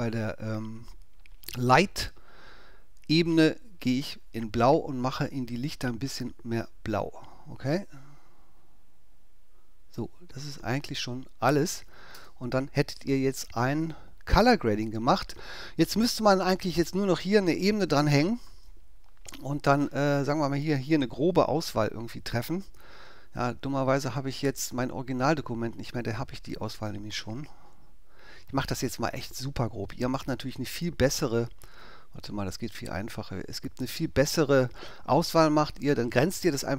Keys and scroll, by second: 12.1 super+0, 18.1 ctrl+alt+super+ä, 22.5 w, 23.5 alt+w.